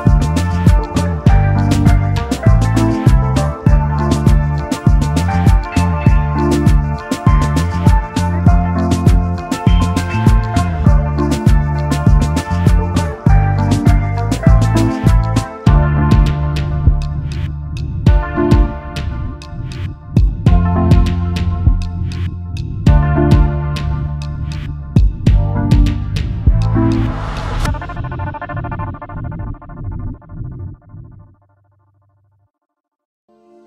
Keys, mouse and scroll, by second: 1.5 right click, 6.4 shift+click, 8.0-8.4 alt+scroll up 1, 9.8 shift+click, 11.5 double click, 14.1 shift+click, 18.2 alt+scroll down 1, 19.6 shift+click, 20.7 ctrl+g, 22.9 shift+click, 24.6 double click, 24.9 space, 25.0 double click, 25.5 alt+scroll down 1, 29.8-30.6 alt+scroll up 1, 31.1-31.6 alt+scroll up 1.